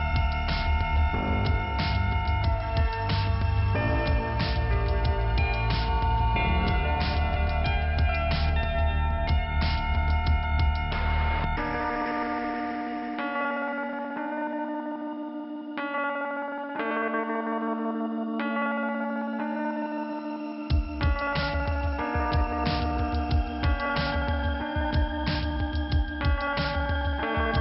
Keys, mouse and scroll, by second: 1.5 click, 1.7 click, 1.9 double click, 1.9 double click, 2.1 double click, 2.1 double click, 2.3 double click, 3.0 double click, 3.9 double click, 6.3 click, 8.8 click, 9.9 click, 10.9 click, 10.9 click, 11.1 click, 11.4 double click, 11.7 double click, 15.2 click, 15.3 click, 15.5 click, 15.7 double click, 15.9 double click, 16.1 double click, 16.3 double click, 16.3 double click, 16.4 double click, 16.7 double click, 17.9 click, 18.2 double click, 18.9 click, 19.0 double click, 19.1 click, 20.7 click, 21.9 click.